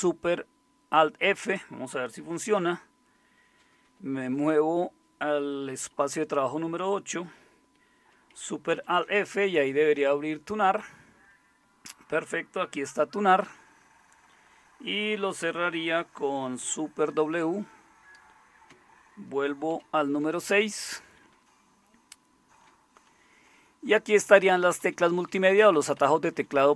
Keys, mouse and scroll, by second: 6.1 super+8, 8.7 alt+super+f, 17.1 super+w, 19.7 super+6, 21.4-24.0 Down, 24.3 Down, 24.6 Down, 25.0 Down, 25.2 Down, 25.3 Down, 25.9 Up, 26.1 Up, 26.3 Up, 26.5 Up, 26.7 Up.